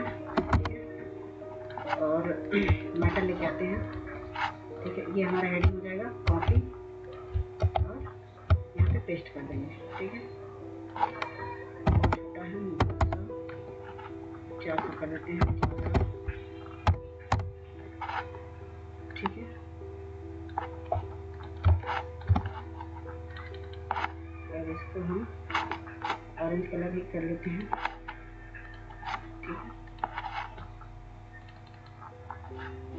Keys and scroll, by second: 0.3 typing, 2.6 Return, 7.2 ctrl+c, 7.5 ctrl+Tab, 8.7 ctrl+v, 11.8 typing, 12.9 typing, 15.1-16.8 typing, 17.3 Return, 21.7 ctrl+space, 22.1 ctrl+space, 22.2 ctrl+space, 22.3 ctrl+space.